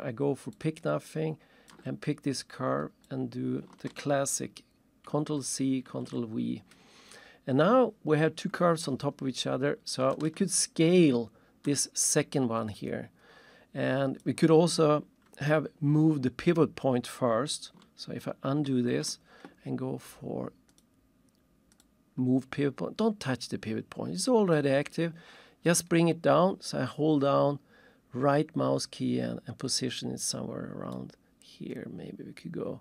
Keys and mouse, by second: 0.8 ctrl+shift+click, 3.1 click, 5.0 ctrl+c, 10.1 ctrl+shift+middle click, 12.0 click, 14.2 click, 18.7 ctrl+z, 20.7 click, 21.7 click, 25.6 right click, 31.0 right click, 31.7 middle click.